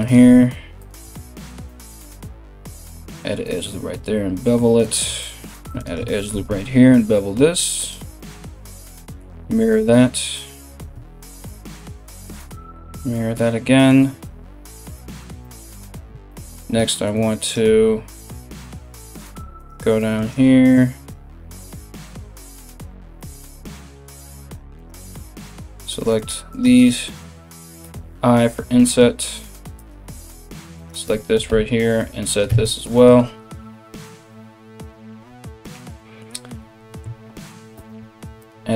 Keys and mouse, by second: 1.5 ctrl+r, 3.0 ctrl+b, 5.2 ctrl+r, 5.9 ctrl+b, 8.0 alt+x, 10.3 ctrl+r, 12.2 alt+x, 15.9 3, 17.1 right click, 17.8 right click, 18.6 right click, 19.2 right click, 19.8 ctrl+right click, 20.6 ctrl+right click, 21.6 ctrl+right click, 22.1 ctrl+right click, 23.8 shift+right click, 24.4 shift+right click, 25.5 shift+right click, 25.8 shift+right click, 26.1 shift+right click, 26.4 shift+right click, 29.9 right click, 29.9 i, 30.4 shift+right click, 32.1 Tab, 32.1 i, 35.2 Tab, 37.3 ctrl+r.